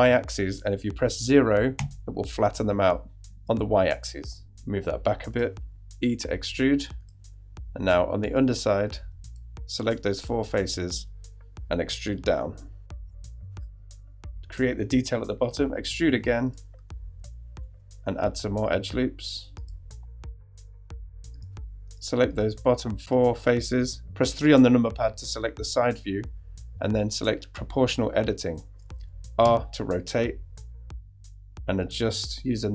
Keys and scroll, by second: 1.8 0, 4.1 y, 5.0 y, 6.0 e, 13.1 super+e, 15.5 e, 18.6 super+r, 20.4 super+z, 21.1 3, 29.4 r.